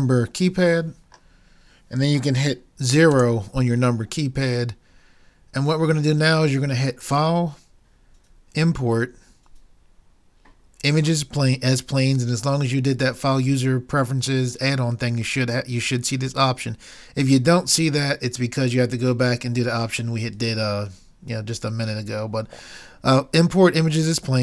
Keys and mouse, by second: 1.2-3.1 middle drag, 3.2 KP_0, 4.2-6.0 middle drag.